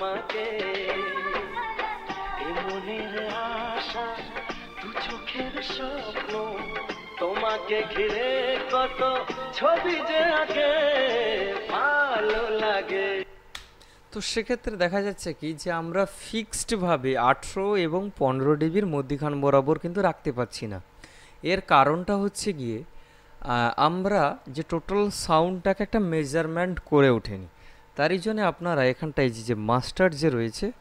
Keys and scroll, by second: 13.4 space.